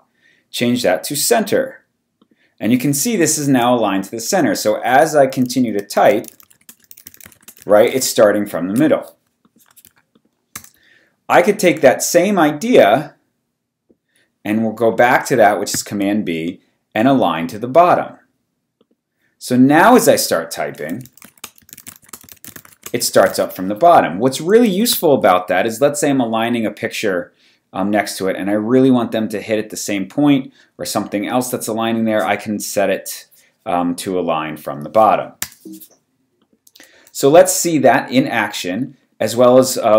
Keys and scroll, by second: 3.6-8.3 typing, 9.8 v, 10.5 BackSpace, 15.7 super+b, 16.8 super+b, 20.1-23.7 typing, 24.9 v, 27.4 v, 35.4 BackSpace.